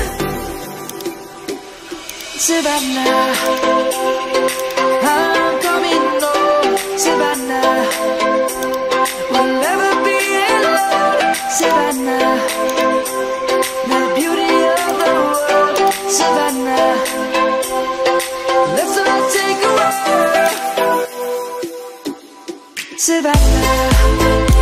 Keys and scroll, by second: 9.7 ctrl+z, 21.4 Return.